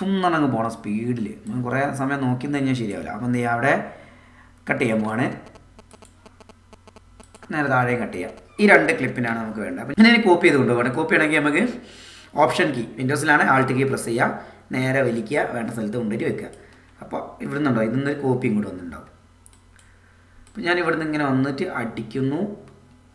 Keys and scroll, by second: 5.2 c, 9.2 a.